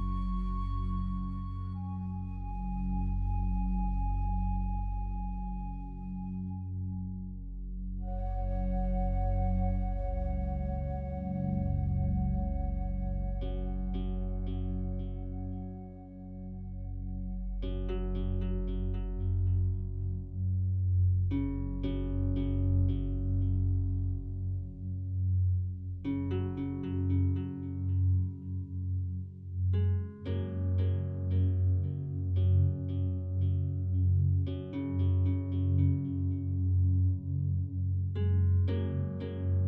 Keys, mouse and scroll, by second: 4.8 a, 5.0 a, 5.5-8.0 alt+drag, 8.0 2, 9.2 alt+shift+right click, 10.4 f, 12.0 a, 12.2 a, 13.4 alt+shift+right click, 14.3 f, 15.8 Tab, 16.2 right click, 16.9-23.6 alt+drag, 23.6-24.1 scroll up 1, 25.0 Tab, 27.0 alt+shift+right click, 28.3 a, 28.9 a, 29.5 alt+shift+right click, 32.2 e, 34.0 right click, 35.2 alt+e, 39.1 alt+click.